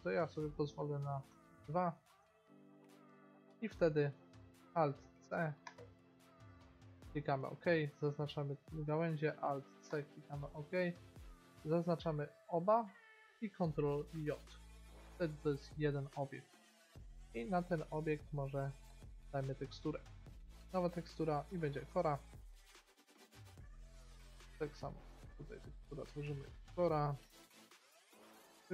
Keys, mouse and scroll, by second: 0.3 middle click, 3.5-5.9 middle drag, 4.8 alt+c, 6.6 middle click, 8.2-9.4 right drag, 9.4 alt+c, 12.0 b, 14.3 ctrl+j, 14.8-16.0 middle drag, 19.0-20.7 drag, 24.2-26.0 drag.